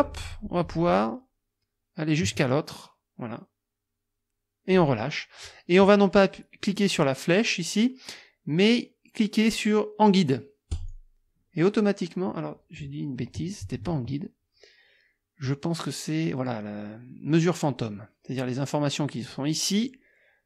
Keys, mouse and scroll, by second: 10.7 click, 13.6 ctrl+z.